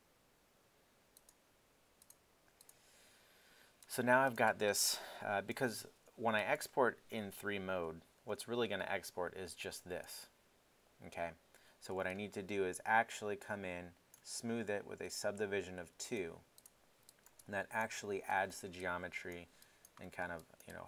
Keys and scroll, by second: 7.9 1.